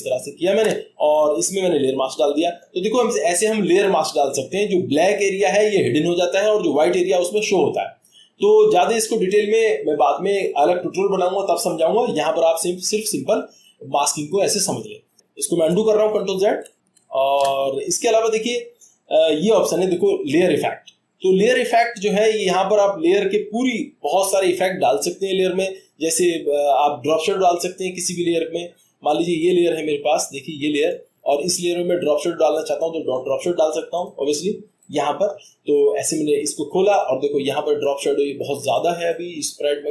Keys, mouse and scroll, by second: 2.2 click, 15.7 click, 16.0 ctrl+z, 16.5 ctrl+z, 16.7 ctrl+z, 16.9 ctrl+z, 18.8-19.6 drag, 22.0-23.1 drag, 34.8 click, 34.9 click, 37.8 click, 39.1 click.